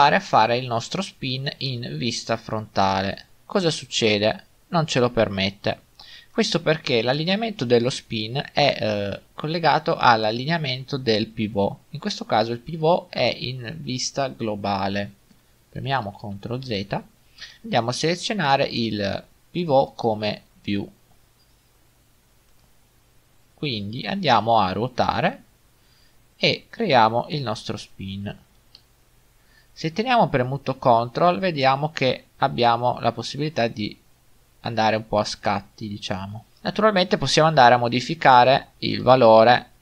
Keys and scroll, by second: 16.2 ctrl+z.